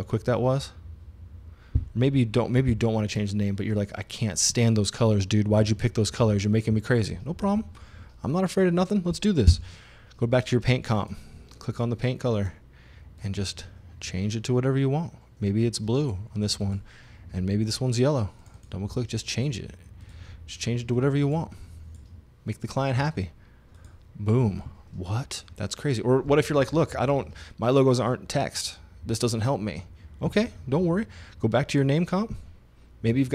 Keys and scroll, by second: 2.7 super+z, 9.5 e.